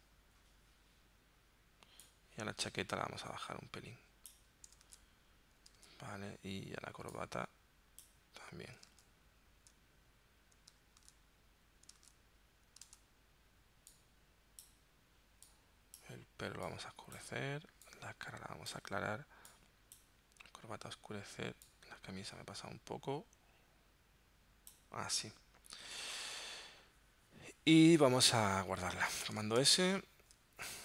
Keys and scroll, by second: 5.0 super+Tab, 5.9 super+Tab, 9.0 super+Tab, 11.0 super+Tab, 12.0 super+Tab, 12.9 super+Tab, 29.6 super+s.